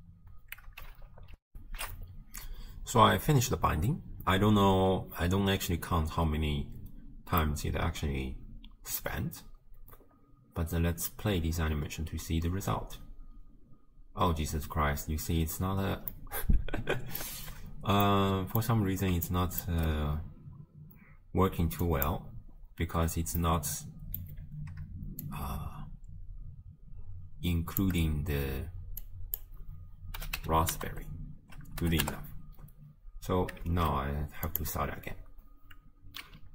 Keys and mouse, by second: 1.8 ctrl+alt+shift+q, 7.7-9.1 drag, 11.9 space, 14.3 space, 16.4-17.3 drag, 17.5 shift+space, 18.2 click, 19.3-19.8 shift+drag, 21.9 click, 23.4 middle click, 25.2-27.8 shift+drag, 29.0-32.2 drag, 33.7 shift+space, 34.5-36.5 drag.